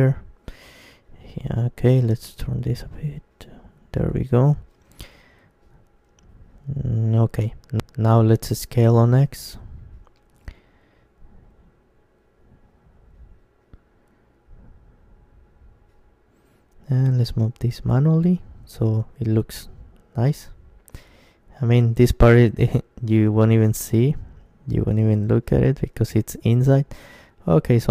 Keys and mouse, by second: 1.5 right click, 2.0-4.0 middle drag, 2.7 c, 4.5 right click, 4.9-8.5 middle drag, 5.3-7.1 right drag, 8.5 KP_1, 10.6 s, 14.6 click, 15.4-16.5 middle drag, 16.2 g, 16.5 right click, 17.2 middle click, 17.4-19.0 drag, 18.3-20.1 right drag, 18.4 g, 19.4-21.2 drag, 20.5 Tab, 21.2-22.8 middle drag, 23.7 ctrl+KP_1, 24.3 Tab, 25.1-27.9 middle drag, 26.1-27.9 drag, 26.4-27.9 right drag.